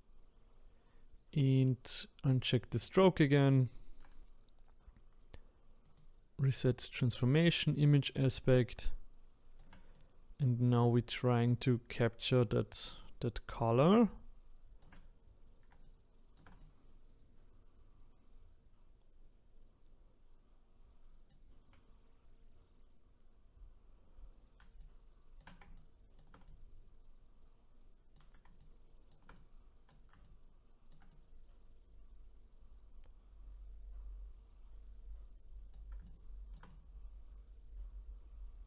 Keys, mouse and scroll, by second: 5.8-8.8 drag, 8.8-19.7 shift+right drag, 24.8-34.6 shift+right drag, 36.0-38.6 ctrl+right drag.